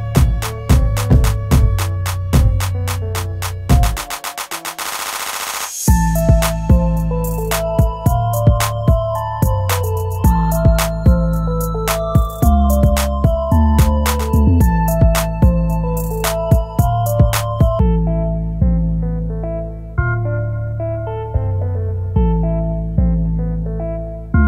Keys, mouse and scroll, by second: 7.9 ctrl+z, 9.4 scroll up 1, 17.3-17.9 scroll down 1, 17.9-21.3 scroll up 1.